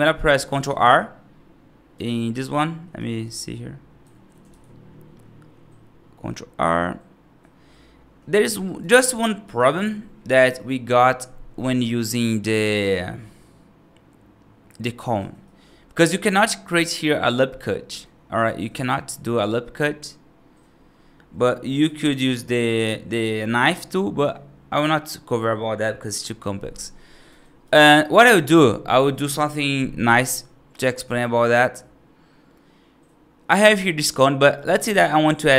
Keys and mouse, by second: 0.1 middle click, 0.5 ctrl+r, 2.8 F2, 3.1 click, 3.9 F3, 4.3 ctrl+r, 8.5 right click, 9.0 click, 9.3 F2, 11.7-12.0 right drag, 15.9 ctrl+r, 17.8 F3, 18.3 ctrl+r, 26.7 right click, 27.5 F2, 27.9 right drag, 29.9-33.4 right drag, 34.5 middle drag.